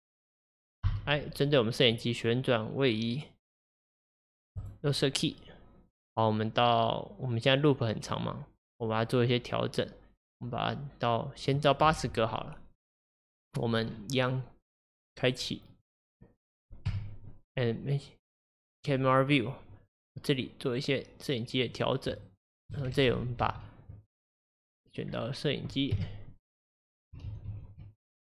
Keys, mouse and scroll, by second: 6.1-9.1 drag, 15.8 click, 16.5 middle click, 16.9 KP_0, 18.7-20.5 drag, 20.5-23.2 middle drag, 23.2 ctrl+z, 23.5 ctrl+z, 25.1-26.0 scroll down 3, 26.0 scroll down 1, 26.0 KP_0, 26.7-27.3 scroll down 1, 27.3 ctrl+z, 27.5 ctrl+z.